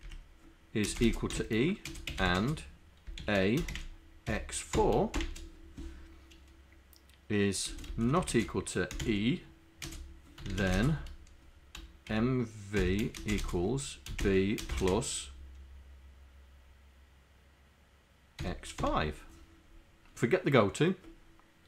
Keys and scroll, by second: 0.9-3.3 typing, 4.3 c, 5.2 shift+0, 8.1 shift+,, 8.2 shift+., 8.3 shift+space, 10.4-11.2 typing, 12.9 shift+b, 13.2 space, 14.2 shift+n, 14.6 space, 14.7 KP_Add, 18.9 5.